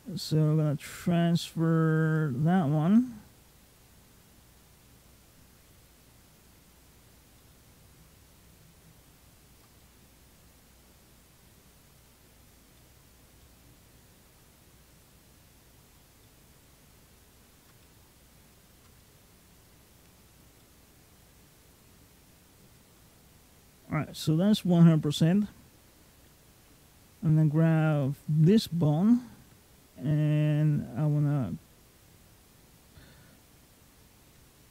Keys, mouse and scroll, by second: 2.2-3.0 scroll down 5, 2.8 middle click, 5.7 click, 7.2 middle click, 8.2 click, 9.6 middle click, 10.4 click, 12.6 middle click, 13.3 middle click, 14.1 click, 16.1 middle click, 16.9 click, 17.7 middle click, 18.8 middle click, 19.5 click, 20.5 middle click, 21.3 click, 22.8 middle click, 23.5-23.8 scroll down 2, 23.8-25.8 scroll up 6, 27.9 ctrl+click, 28.9 click.